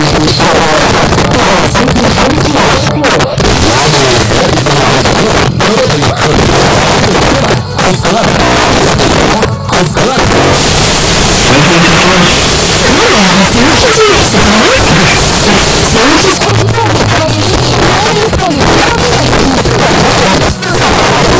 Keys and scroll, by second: 0.0-1.3 typing, 1.6 Down, 1.7 Down, 2.2 Up, 2.4 Up, 2.5 Up, 3.2 Return, 16.4 Page_Down.